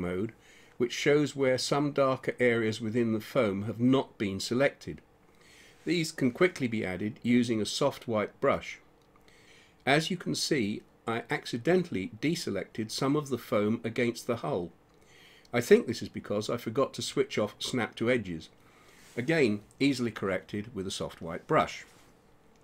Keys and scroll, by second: 0.3 space, 8.9 ], 17.7 ].